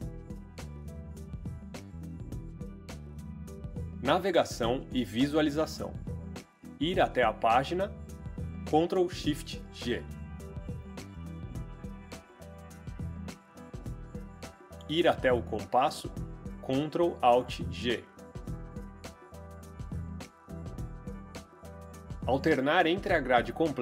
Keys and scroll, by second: 0.5 Return, 9.2 ctrl+shift+g, 11.2 4, 11.5 Return, 17.1 ctrl+alt+g, 18.2-19.0 typing.